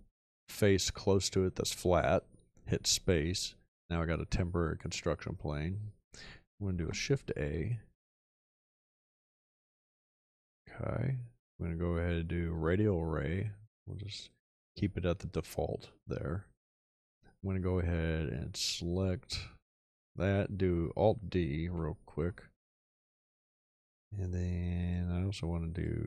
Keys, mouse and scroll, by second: 6.7 shift+a, 21.7 alt+d.